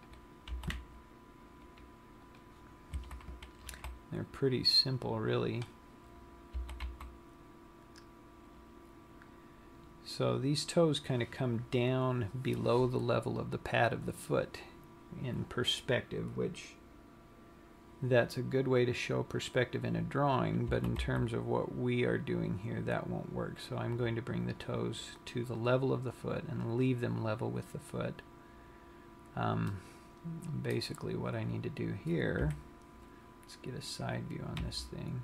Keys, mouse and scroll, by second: 0.4 click, 1.2 g, 2.8 click, 3.3 a, 4.2 b, 6.9 g, 21.2 s, 25.3 click, 26.4-28.1 scroll up 2, 28.1-28.5 scroll up 2, 29.6 scroll down 1, 30.0 middle click, 32.5 KP_3, 33.8-35.2 scroll down 1.